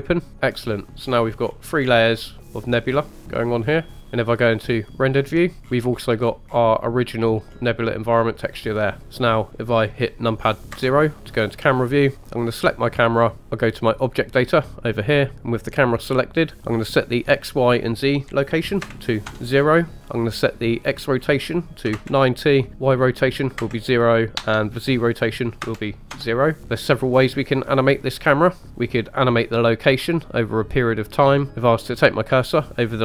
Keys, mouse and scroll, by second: 0.3 middle click, 0.3-0.6 scroll down 2, 1.0-2.3 scroll up 9, 2.4 middle click, 5.6-6.8 scroll down 7, 6.8-7.1 middle drag, 6.8-7.1 scroll down 3, 7.5-8.3 scroll up 1, 8.3-9.0 scroll up 1, 9.0 scroll up 4, 10.7 KP_0, 12.4 click, 13.4 click, 14.5 click, 15.9 click, 16.8-19.9 drag, 21.0-26.1 drag, 26.6 scroll up 4, 28.7-29.4 scroll down 2.